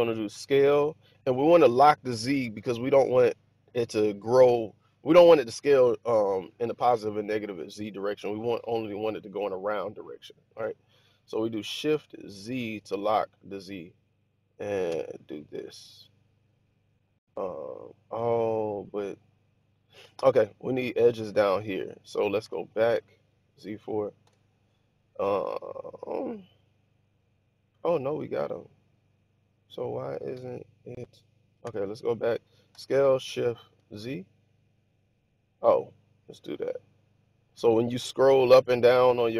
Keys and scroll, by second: 0.3 s, 12.2 shift+z, 19.5 Escape, 22.3 z, 24.1 4, 31.6 1, 32.6 s, 33.7 shift+z.